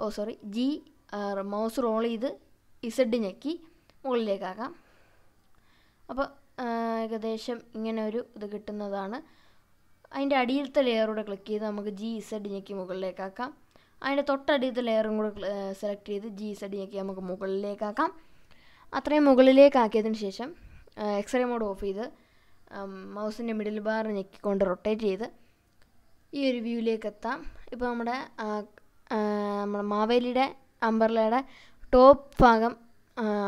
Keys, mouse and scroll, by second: 2.0 g, 2.3-4.0 scroll down 7, 4.0-4.6 scroll up 2, 4.6 z, 7.5 click, 8.2-9.9 drag, 10.9 g, 11.5 z, 12.6 click, 13.3-14.5 drag, 15.6 g, 16.3 z, 17.5 click, 19.3 click, 21.3 click, 22.5-28.1 middle drag, 28.6-32.8 middle drag.